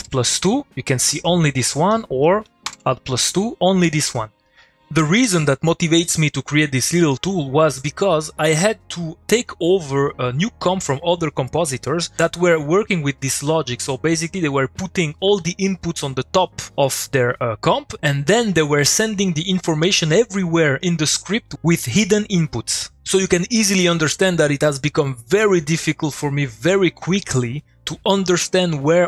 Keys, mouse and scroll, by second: 1.9 click, 4.4 middle click, 4.4 click, 4.6 middle click.